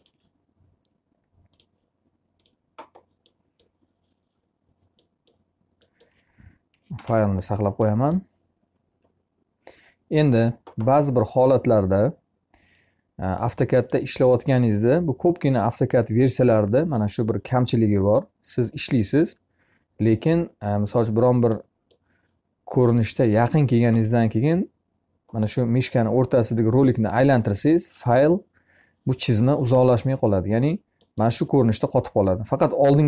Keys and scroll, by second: 6.3 ctrl+s.